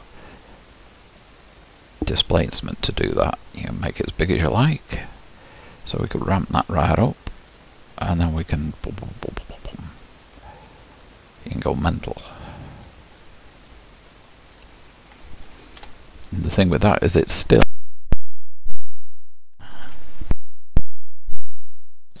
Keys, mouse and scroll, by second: 0.6-3.2 shift+drag, 8.5-11.8 drag, 14.5-15.2 scroll down 1, 15.8 Tab, 16.5-17.8 scroll up 6, 18.8-19.8 scroll down 1, 19.8 a, 20.7 KP_Decimal, 21.6-22.2 scroll down 6.